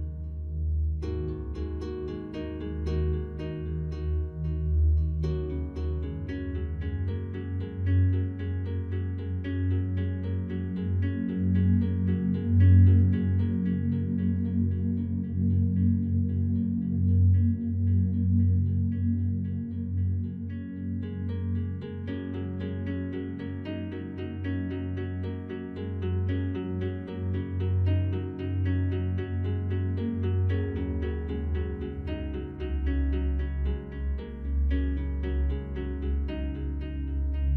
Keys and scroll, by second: 0.8 ctrl+d, 5.7 ctrl+0, 25.3 ctrl+z, 36.4 ctrl+z.